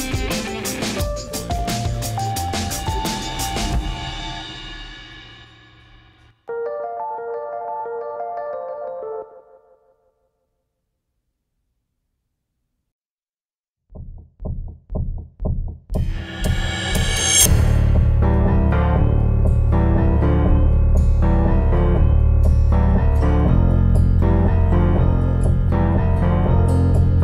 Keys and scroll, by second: 13.4 super+z.